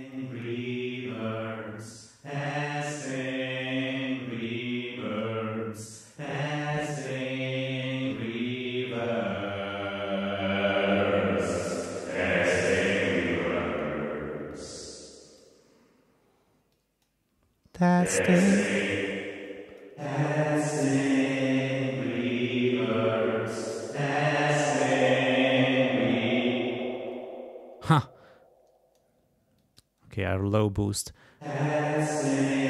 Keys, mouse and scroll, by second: 0.1 click, 4.4 click, 6.7 click, 7.6 click, 8.0 click, 10.4 click, 11.2 click, 12.2 click, 13.6 click, 14.5-15.6 drag, 16.7 click, 18.9 space, 19.5 click, 19.9 space, 22.5-23.9 drag, 24.1 click, 25.3 click, 26.4 space, 27.1-29.2 drag, 29.6 click, 31.4 space.